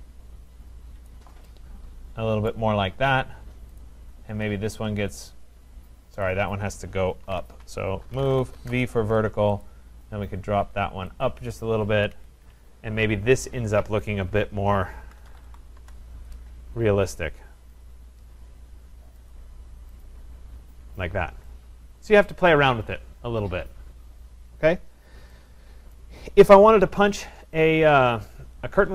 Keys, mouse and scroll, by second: 1.1 click, 2.5 right click, 3.8 click, 6.3 click, 7.3 ctrl+z, 7.8-9.1 typing, 9.6 click, 11.2 click, 11.9 Escape, 12.2 Escape, 12.4 Escape, 14.0 click, 14.9-15.9 typing, 17.8 click, 19.3 click, 20.0 click, 22.3 right click, 26.0 right click, 26.5 scroll, 26.7 middle click, 27.2 scroll, 27.4 middle click, 27.7 right click.